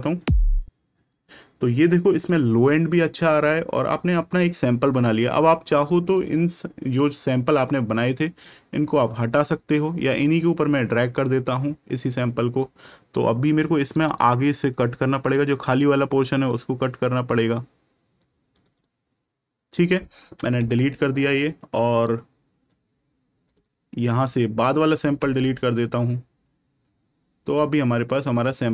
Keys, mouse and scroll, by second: 0.9 click, 6.1 click, 11.9 click, 15.3 click, 18.6 click, 22.0 click, 28.4 click.